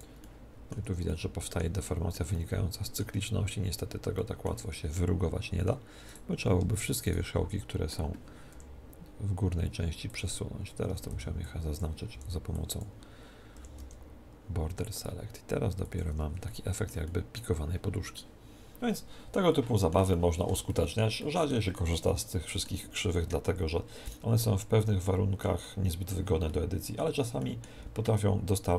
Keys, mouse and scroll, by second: 0.2-6.5 middle drag, 0.7 Tab, 4.5 Tab, 6.0-8.9 right drag, 8.5 s, 10.1-11.9 drag, 10.9 a, 11.1 b, 12.1 b, 13.5 s, 15.9 click, 16.1 Tab, 16.4-23.6 middle drag, 24.0-26.1 right drag, 25.0-28.7 middle drag.